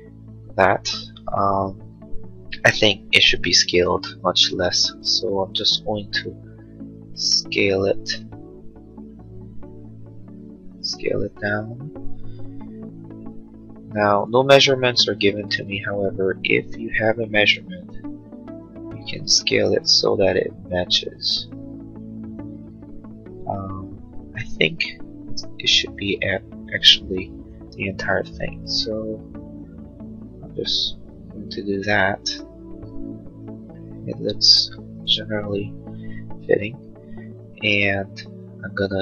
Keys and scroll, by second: 4.6 s, 12.4 m, 33.7 space.